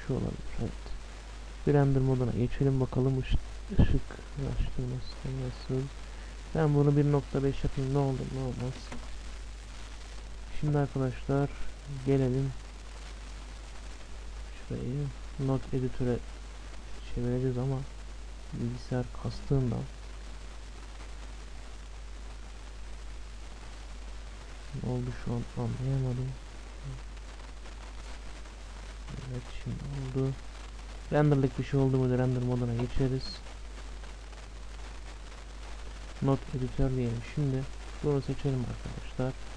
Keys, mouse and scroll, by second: 0.0-3.3 drag, 6.2-7.8 drag, 12.8-14.3 drag, 20.3-21.6 drag, 23.7-26.8 drag, 28.0-29.9 drag, 30.6-32.7 drag, 34.0-36.0 drag.